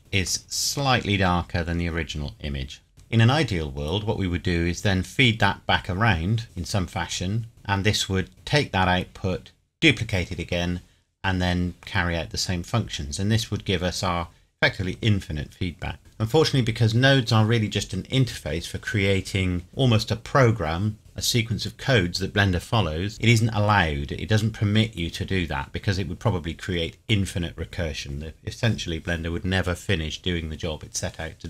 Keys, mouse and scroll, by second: 0.0 middle click, 2.9 click.